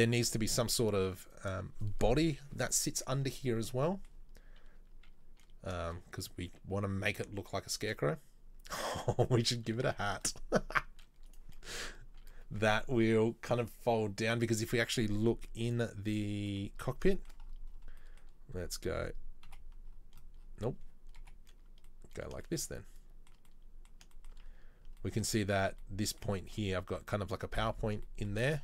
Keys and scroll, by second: 5.9 shift+a.